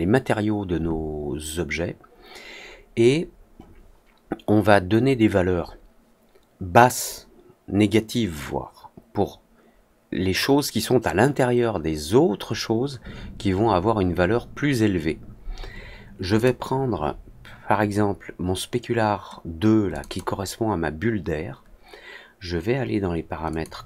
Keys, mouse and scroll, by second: 16.3 click, 19.8 click, 20.0 click, 23.4 click.